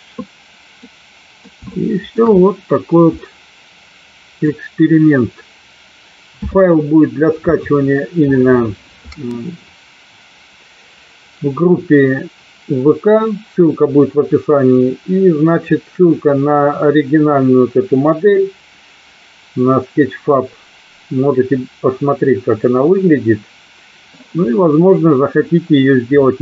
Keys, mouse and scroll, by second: 0.9 middle click, 1.9 shift+middle click, 3.3-4.7 middle drag.